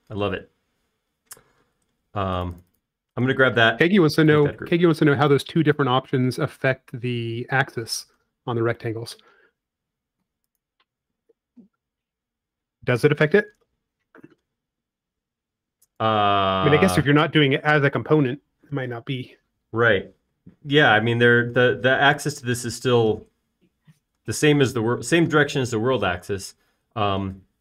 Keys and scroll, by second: 7.6 shift+q, 8.8 i, 12.3 space.